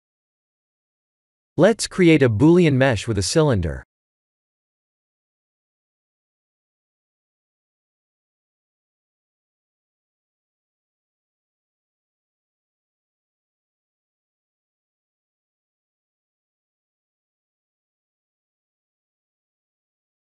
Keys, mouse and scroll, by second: 0.5 KP_3, 1.0-1.5 scroll up 5, 1.7 click, 2.1 shift+a, 4.9 r, 7.5 s, 8.7 g, 11.4 s, 13.4 middle click, 14.8 KP_3, 15.4 KP_1, 16.2 g, 18.8 middle click, 19.3 middle click.